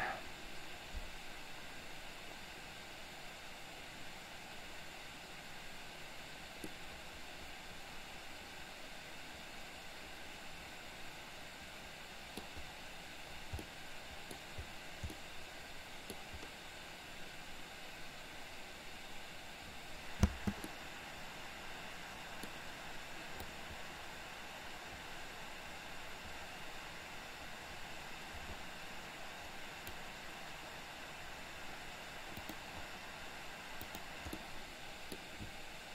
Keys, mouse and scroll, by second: 6.7-12.5 middle drag, 13.7 middle click, 15.1-16.2 middle drag, 20.2 space, 20.8-22.5 middle drag, 23.6-30.0 drag, 34.0 click, 34.3-35.2 middle drag.